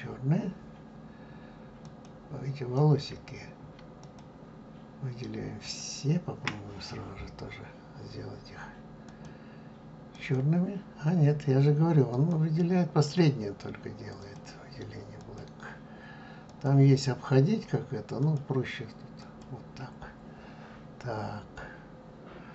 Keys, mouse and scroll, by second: 0.0-2.1 drag, 4.1 shift+click, 5.8 shift+click, 10.4-12.2 drag, 15.5-16.7 drag, 19.5-21.3 drag, 21.3-22.1 scroll down 1, 22.1-22.5 scroll down 1.